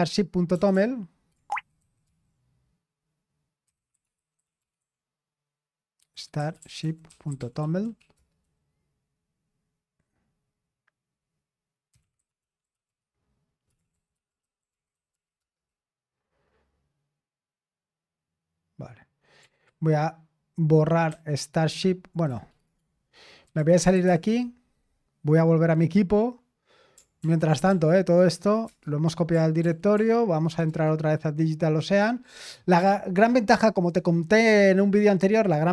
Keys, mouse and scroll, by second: 0.0-0.7 typing, 1.5 ctrl+c, 1.7 ctrl+c, 2.0 ctrl+c, 3.4-4.9 typing, 6.2-8.6 typing, 11.6-16.4 typing, 19.5 r, 21.0 typing, 22.2-24.4 typing, 27.2 ctrl+p, 27.6 ctrl+p, 28.6 Return, 29.6 ctrl+p, 29.9 ctrl+p, 30.6 Return.